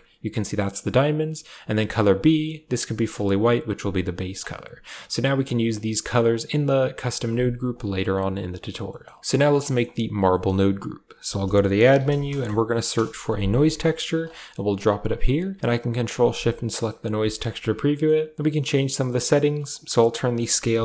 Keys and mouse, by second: 1.5 click, 4.2 click, 4.8 click, 7.5 click, 9.5 middle click, 10.1 middle click, 11.1 shift+a, 14.2 middle click, 14.7 drag, 15.9 ctrl+shift+click, 17.8 middle click, 19.5-20.6 drag.